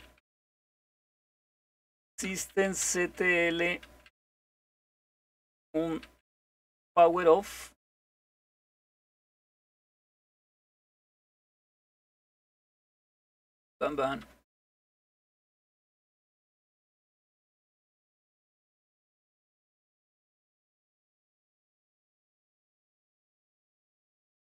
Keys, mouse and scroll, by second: 0.0-9.0 typing, 10.9-13.8 typing, 15.8 typing, 19.4-21.9 typing.